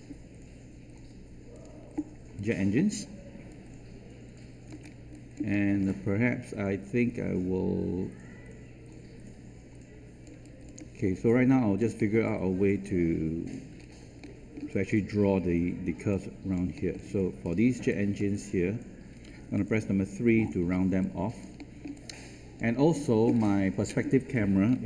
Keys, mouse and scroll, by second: 3.4-4.6 alt+drag, 4.8 scroll up 1, 5.1 alt+click, 5.5 alt+middle click, 5.8-10.2 alt+drag, 10.4 alt+click, 11.2 alt+click, 11.9 alt+middle click, 12.2 alt+click, 13.7-14.2 scroll up 2, 14.2 alt+middle click, 16.0 alt+click, 16.7 alt+middle click, 17.4 click, 17.9 alt+click, 19.6 3, 20.7 scroll down 1, 21.0 alt+click, 21.6 alt+middle click, 21.9 alt+click.